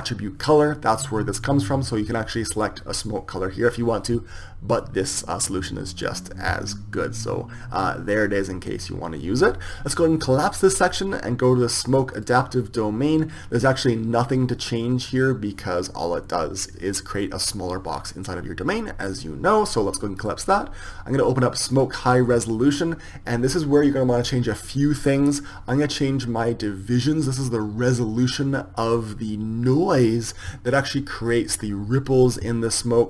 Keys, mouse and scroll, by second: 11.4-19.5 drag, 20.9-31.4 drag.